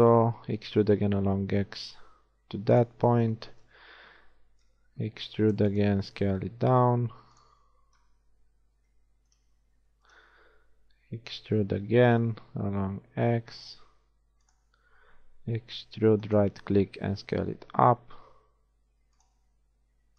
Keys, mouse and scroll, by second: 0.5 e, 3.1 z, 4.7 KP_3, 5.5 e, 6.2 s, 8.1 KP_1, 11.6 e, 15.9 e, 17.1 s.